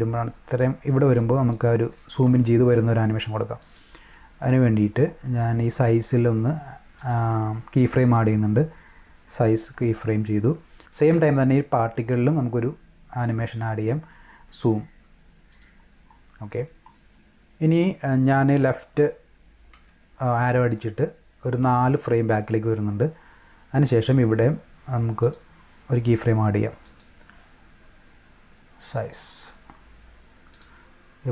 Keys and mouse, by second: 3.6 click, 6.9 click, 15.5 click, 25.2 click, 26.8 click, 30.5 click.